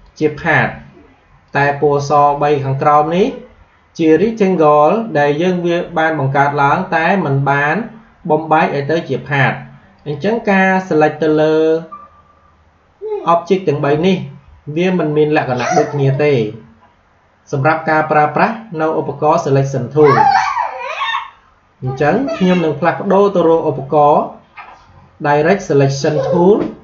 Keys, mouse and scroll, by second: 9.9 click, 14.7 click, 21.7 click.